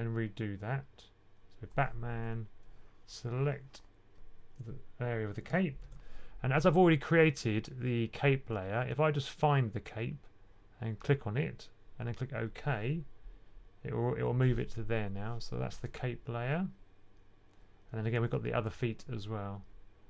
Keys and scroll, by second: 5.7 super+8.